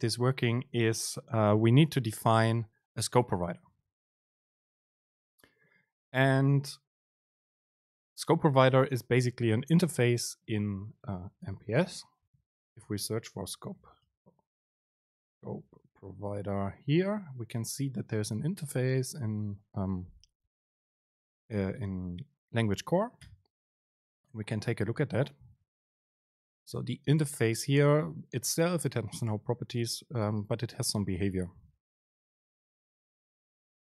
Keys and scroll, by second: 11.9 super+n.